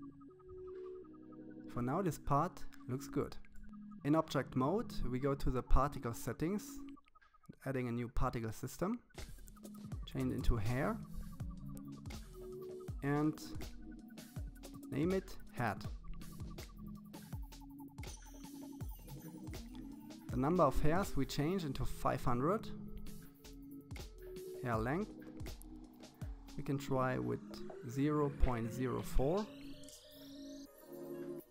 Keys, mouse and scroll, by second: 4.2 click, 6.1-7.1 drag, 8.7 click, 10.4 click, 11.4-13.1 drag, 19.0-20.5 drag, 23.1-24.6 drag, 29.5-31.5 scroll down 6.